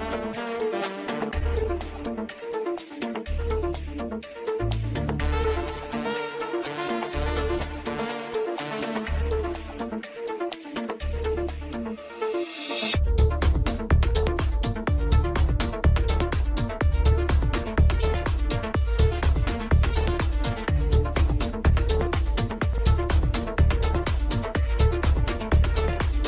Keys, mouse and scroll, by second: 0.0 click, 1.0-1.6 scroll down 1, 1.6-5.8 middle drag, 5.8-7.0 scroll up 4, 7.5 click, 8.1 Tab, 8.8 middle click, 9.5-10.5 scroll up 6, 10.5-11.9 shift+middle drag, 11.9-14.2 scroll down 1, 14.2 click, 16.7-17.4 scroll up 1, 18.1-19.8 middle drag, 19.8 click, 21.3 alt+shift+click, 23.1-24.2 middle drag, 24.2 alt+shift+click, 24.4 scroll down 5, 24.6 shift+middle click, 25.0-25.6 scroll up 2, 25.6 alt+shift+click, 25.8 scroll down 1, 26.1 middle click.